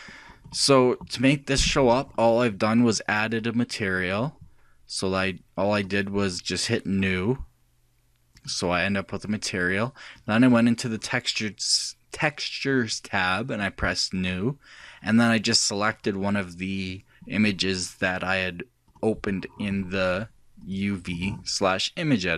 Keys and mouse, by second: 1.6-5.2 drag, 5.9-10.1 drag, 10.6-12.5 drag, 14.2-15.9 drag, 17.6 click, 20.6-22.2 drag.